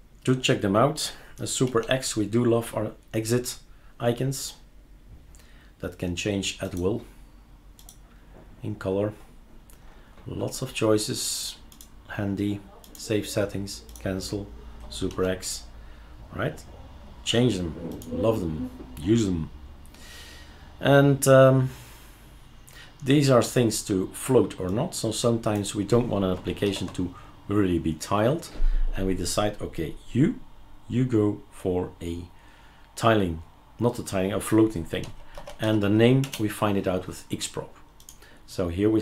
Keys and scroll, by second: 1.7 super+x, 15.1 super+x, 26.6 ctrl+alt+t, 35.0-35.8 typing, 36.2 Return.